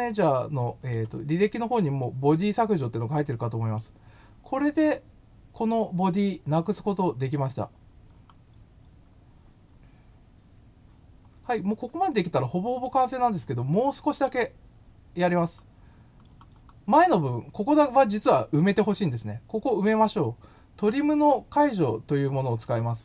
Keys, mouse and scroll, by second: 3.7-4.7 middle drag, 6.1-7.3 scroll up 1, 7.8 scroll up 1, 8.1 scroll down 3, 8.5-8.9 scroll up 2, 9.7 scroll up 1, 11.2-12.1 scroll up 3, 12.2 middle click, 14.1 click, 15.9 scroll up 3, 16.2-16.6 scroll down 5.